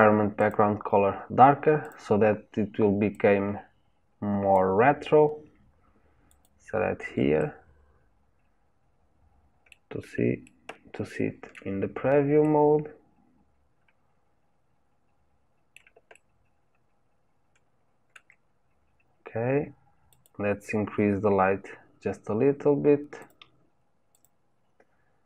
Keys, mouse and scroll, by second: 3.2 click, 6.3 click, 7.4-10.4 middle drag, 10.5-20.1 shift+middle drag, 20.1 click, 23.2 click, 24.1-25.2 drag.